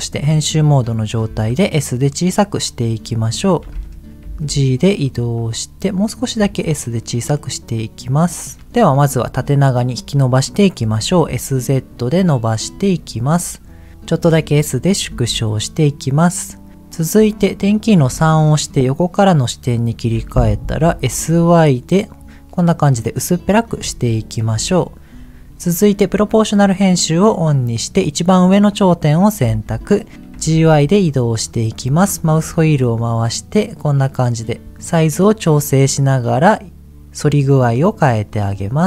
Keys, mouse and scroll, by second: 1.5 s, 2.6 click, 3.0-4.1 scroll up 7, 4.4 g, 5.0 click, 5.3-6.0 scroll up 2, 6.3 s, 8.5 click, 10.8 s, 11.1 z, 12.6 click, 13.0-13.6 scroll down 2, 14.3 s, 14.8 click, 15.0 g, 15.4 click, 15.7-16.1 scroll up 2, 18.2 KP_3, 20.7 s, 21.0 y, 22.8 click, 23.1 middle click, 24.4 KP_3, 25.4 click, 26.4 click, 27.7 click, 29.4 g, 30.1 right click, 30.3 g, 30.5 y, 31.0-33.9 scroll up 13, 34.6 g, 34.6 y, 36.9 scroll down 1, 38.2 click.